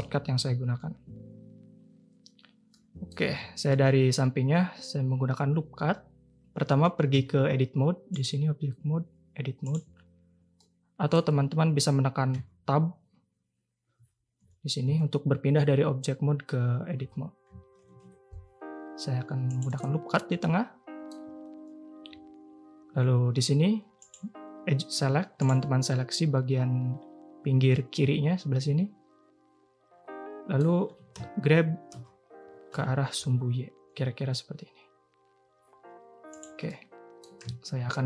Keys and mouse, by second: 0.0 n, 2.7 click, 3.3 Tab, 3.7 click, 7.1 Tab, 8.2-9.7 drag, 10.5 click, 12.3 Tab, 14.0 Tab, 14.8 Tab, 17.1 2, 18.0 ctrl+r, 20.4-20.9 drag, 20.9 middle click, 24.0 click, 27.7-30.6 middle drag, 30.8 g, 36.6 middle click, 37.8 ctrl+b.